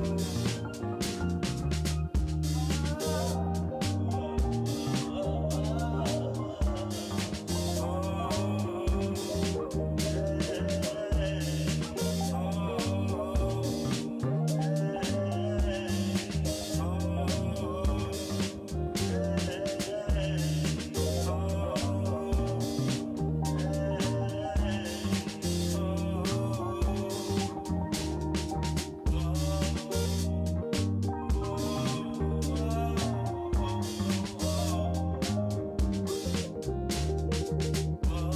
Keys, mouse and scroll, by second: 0.7 click, 2.1 click, 3.2 click, 3.7 5, 4.0 1, 4.1 2, 4.5 Return, 7.5 click, 9.5-10.2 drag, 10.7-11.3 drag, 13.9 ctrl+s, 16.9-18.7 shift+drag, 20.6 click, 23.6 click, 25.4 drag, 32.8 ctrl+s.